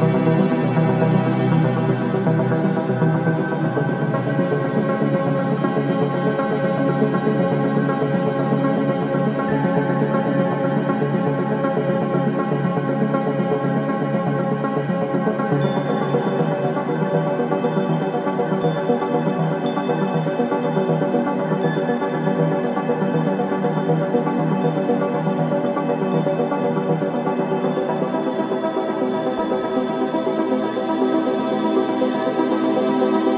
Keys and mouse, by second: 0.1 click, 1.2 g, 4.6 s, 6.5 click, 7.7 g, 11.6 click, 13.1 g, 21.3 g, 30.2 r.